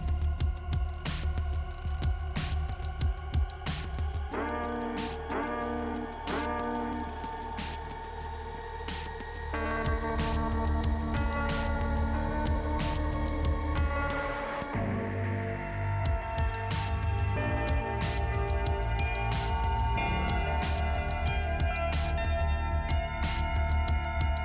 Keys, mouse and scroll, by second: 0.7 click, 3.0 click, 4.8 click, 4.9 click, 5.6 click, 7.6 click, 9.3 click, 10.7 click, 10.9 click, 11.6 click, 15.0 click, 16.8 click, 19.2 click, 19.3 click, 20.5 click, 21.3 click, 22.5 click, 22.7 click, 23.6-24.4 scroll down 2.